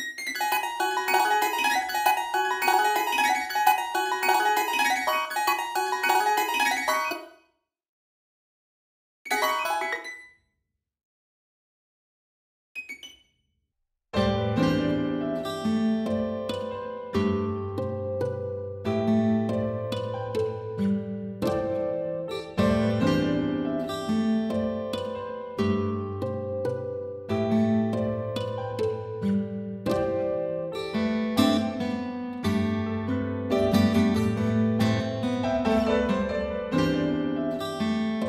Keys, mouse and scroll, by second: 0.2 alt+click, 0.3 space, 0.8 alt+click, 1.8 space, 1.9 space, 2.6 alt+click, 3.1 alt+click, 3.4 space, 3.5 space, 3.8 alt+click, 4.0 alt+click, 4.3 alt+click, 5.2 alt+space, 5.2 alt+click, 6.1 alt+click, 7.1 space, 7.2 ctrl+click, 8.4 alt+click, 9.3 space, 9.4 alt+click, 9.9 space, 10.4 alt+click, 10.7 scroll down 1, 10.8 scroll up 1, 10.9 scroll down 1, 11.1 ctrl+click, 11.7 right click, 11.8 ctrl+click, 12.5 ctrl+click, 13.1 right click, 13.3 alt+click, 14.9 double click, 16.3 ctrl+click, 17.8 alt+right click, 20.7 ctrl+click, 22.3 ctrl+2, 22.3 space, 22.5 space, 24.2 right click, 25.7 double click, 27.1 ctrl+click, 27.7-28.5 alt+scroll up 2, 28.5 alt+scroll up 1, 28.6 ctrl+click, 28.6-28.9 alt+scroll, 28.9-29.6 alt+scroll up 2, 29.6 ctrl+click, 29.9 alt+scroll up 1, 31.0 right click.